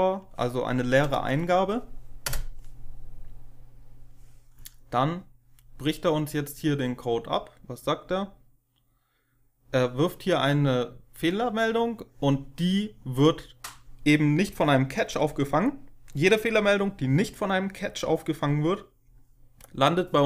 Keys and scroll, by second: 2.2 Return.